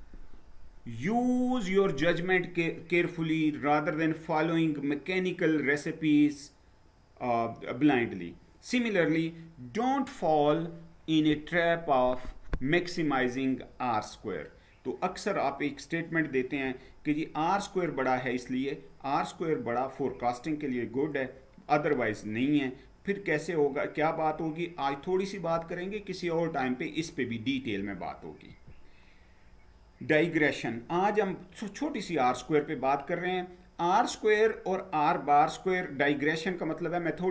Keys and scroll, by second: 28.3 Down.